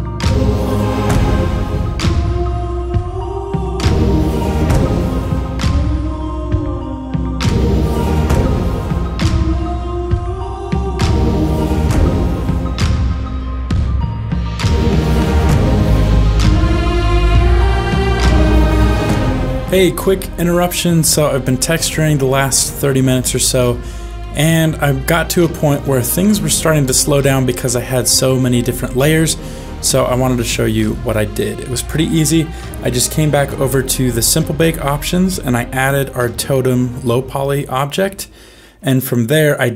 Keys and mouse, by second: 2.8 ctrl+space, 2.8 ctrl+s, 2.9 click, 3.0-4.9 typing, 3.1 click, 3.5 ctrl+s, 3.6 click, 4.1 click, 4.3 click, 4.3 ctrl+s, 4.5 click, 4.8 click, 5.5 click, 5.8 click, 5.9 middle click, 6.0 click, 6.2 click, 6.3 click, 6.7 middle click, 6.7 f, 6.7 click, 7.0 f, 7.1 click, 7.3 click, 7.4 middle click, 7.5 click, 7.6 click, 7.8 click, 8.0 click, 8.2 ctrl+middle click, 8.3 middle click, 8.5 shift+d, 8.6 click, 8.9 ctrl+s, 8.9 shift+click, 9.1 click, 9.3 f, 9.4 middle click, 9.5 click, 9.8 click, 10.5 click, 10.6 click, 10.8 middle click, 10.9 click, 11.0 ctrl+z, 11.3 f, 11.4 click, 11.6 click, 12.0 click, 12.1 click, 12.2 f, 12.3 click, 12.5 click, 12.8 click, 13.1 ctrl+middle click, 13.3 click, 13.3 f, 13.5 click, 13.7 click, 14.0 click, 14.7 click, 14.9 click, 15.1 click, 15.4 click, 15.7 click, 16.0 click, 16.1 click, 16.6 ctrl+middle click, 16.8 click, 17.3 click, 17.5 click, 17.8 click, 18.1 ctrl+click, 18.5 shift+a, 18.8 middle click, 22.1 shift+middle click, 23.3 shift+middle click, 24.3-25.4 middle drag, 25.8 shift+middle click, 26.5 ctrl+middle click, 27.3 middle click, 28.6 middle click.